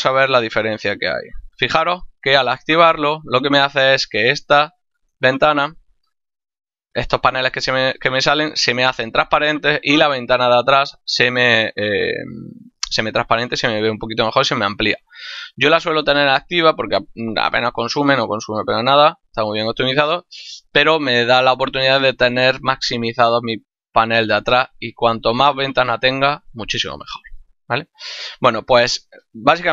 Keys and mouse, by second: 1.1 click, 3.7 click.